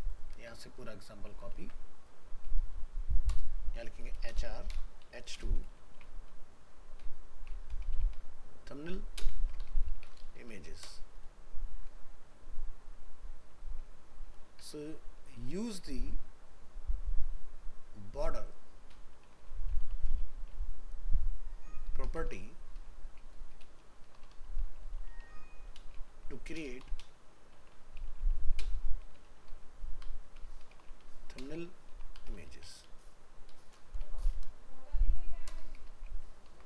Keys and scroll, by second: 1.5 ctrl+c, 36.1 ctrl+v.